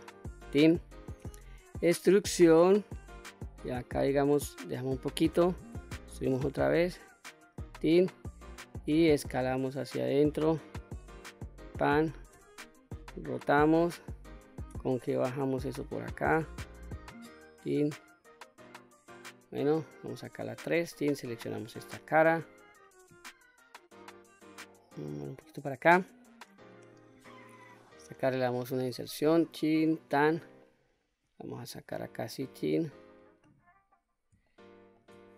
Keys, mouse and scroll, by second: 0.7 e, 4.4 click, 5.2 e, 6.9 click, 8.3 s, 10.9 click, 11.8 r, 13.0 click, 14.2 g, 16.3 click, 17.3-17.9 scroll down 2, 18.1 middle click, 20.0 3, 20.5 click, 21.0-21.6 middle drag, 24.0-25.2 drag, 26.2-28.3 middle drag, 28.3 i, 29.4 click, 29.7-30.1 middle drag, 30.7-32.2 drag, 32.5-32.9 scroll up 1, 32.9-33.8 middle drag, 33.9-34.4 shift+middle drag.